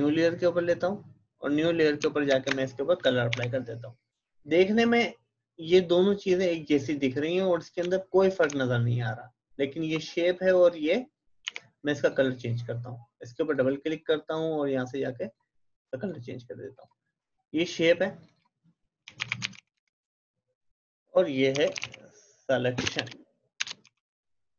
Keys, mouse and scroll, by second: 0.6 click, 2.3 alt+Delete, 3.3 ctrl+d, 7.8 ctrl+d, 7.9-8.5 ctrl+scroll up 1, 8.6 alt+scroll up 1, 11.4 v, 12.1 click, 18.8-20.1 typing, 20.8 click, 21.3-24.5 typing.